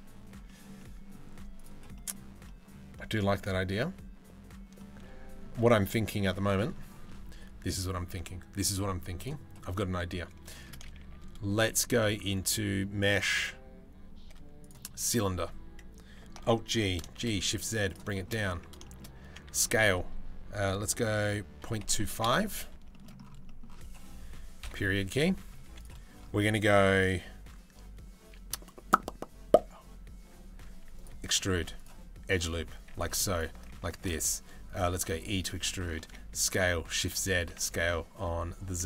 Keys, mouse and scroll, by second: 0.1 shift+middle drag, 0.4-0.8 middle drag, 1.2 middle click, 1.6 middle click, 2.1 middle click, 2.6 shift+middle drag, 3.0 middle click, 4.4 shift+middle drag, 5.2 middle click, 6.2 shift+middle click, 8.8 click, 10.2 shift+middle drag, 10.6 shift+a, 16.1 alt+g, 17.8 shift+middle click, 18.5 shift+middle click, 18.9 Tab, 19.1 s, 22.5 shift+middle click, 24.3 KP_Decimal, 25.3 3, 29.8 e, 31.0 ctrl+r, 32.3 3, 33.6 alt+s, 34.6 e, 35.6 alt+s, 37.0 s.